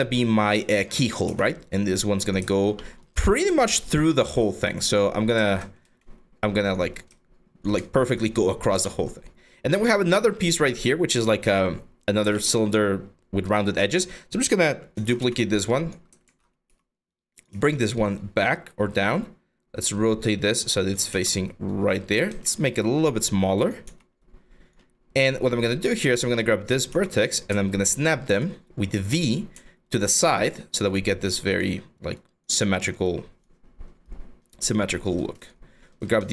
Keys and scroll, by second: 0.0-0.9 typing, 3.1 r, 3.9 w, 5.4 r, 7.9 4, 14.6 ctrl+z, 14.8 w, 15.9 ctrl+z, 16.3-17.6 typing, 20.7 w, 22.1 r, 23.5 w, 26.5-30.4 typing, 35.8 r.